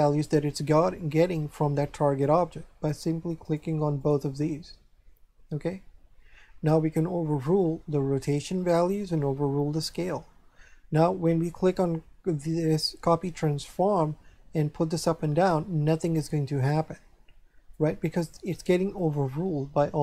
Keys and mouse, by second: 3.5 click, 7.6 click, 9.2 click, 13.7 click.